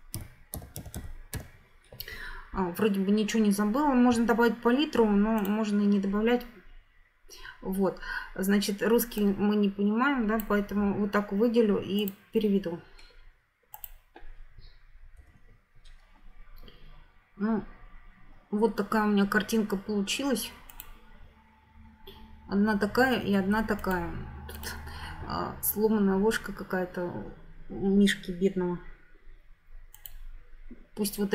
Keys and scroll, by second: 0.0-1.9 typing, 15.3 F9.